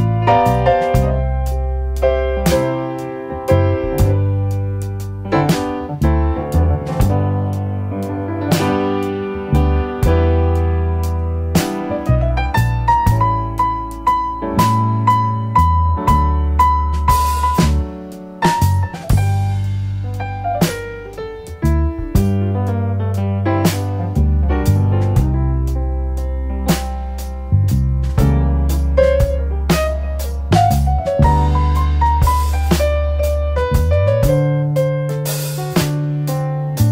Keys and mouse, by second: 1.5-2.6 shift+middle drag, 3.5-3.9 drag, 4.6-7.6 drag, 8.3-10.7 drag, 12.1 shift+click, 13.4 shift+a, 22.3-24.9 drag, 26.6 middle click, 27.6-28.1 drag, 28.6-31.8 drag, 33.3 shift+a.